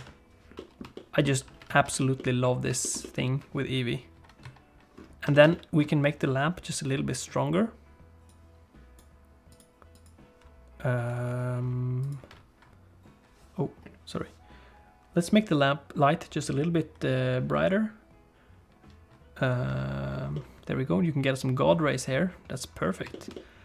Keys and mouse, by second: 0.5 middle click, 0.9 shift+middle click, 2.1 middle click, 2.8 shift+middle click, 3.0 middle click, 4.5 click, 5.3 shift+middle click, 5.5 middle click, 8.3 click, 9.5 click, 12.0 click, 19.6 click, 20.3-23.0 middle drag, 23.1 shift+middle click, 23.3 middle click.